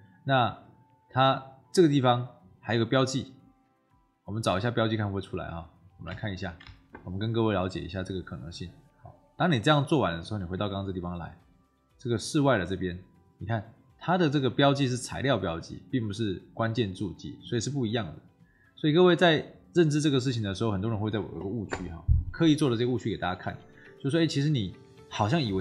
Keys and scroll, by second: 6.0 ctrl+c, 6.5 ctrl+v.